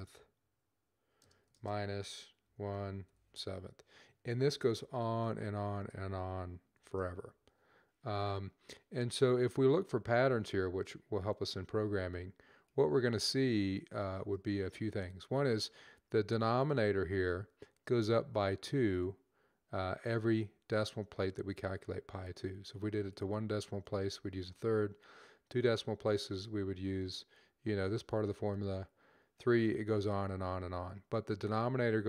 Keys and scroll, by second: 1.3-3.0 typing, 4.4-5.3 typing, 6.6 typing, 8.5-9.2 typing.